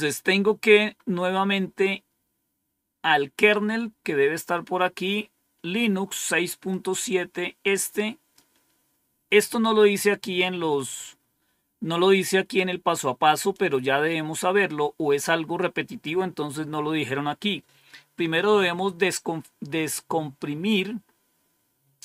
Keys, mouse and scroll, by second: 0.3-0.7 scroll up 2, 0.8-1.3 scroll up 2, 3.6-4.2 scroll up 2, 4.2-4.9 scroll up 1, 6.6-8.3 drag.